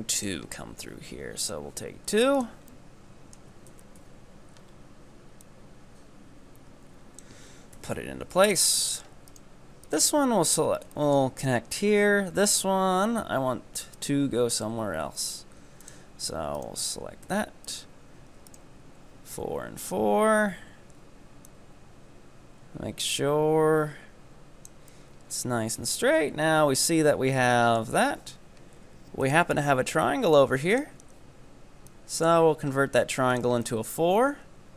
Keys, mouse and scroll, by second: 0.2-2.8 drag, 2.8 middle click, 3.7 KP_1, 4.1 KP_9, 4.7-5.4 scroll up 2, 5.4-7.5 drag, 7.5-7.8 scroll down 1, 7.8 KP_3, 8.6-8.9 scroll up 2, 8.9-9.3 shift+middle drag, 9.3 right drag, 9.9 ctrl+right click, 10.6 f, 11.0-14.0 shift+middle drag, 14.0 right click, 14.7 e, 16.6 ctrl+right click, 17.3 f, 17.8 right click, 18.5 ctrl+right click, 19.4 f, 19.9 right click, 20.5 KP_7, 21.5-24.5 drag, 24.9-26.2 middle drag, 26.2 KP_3, 27.0-27.5 scroll up 3, 27.5-29.2 shift+middle drag, 29.2-33.7 drag, 33.7-34.7 middle drag.